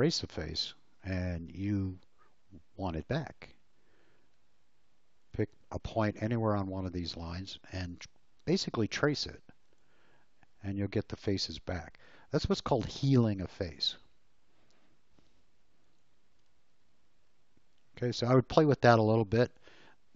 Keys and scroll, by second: 4.1 l, 11.8 space, 16.5 Delete, 18.9 l.